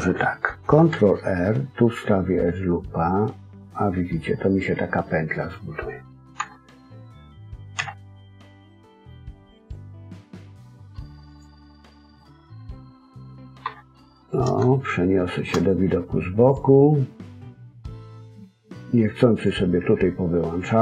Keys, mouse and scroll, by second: 0.9 ctrl+r, 11.2 click, 11.9 scroll down 1, 12.1 middle click, 13.6 KP_3, 14.6 shift+middle click, 16.4 click, 19.3 click.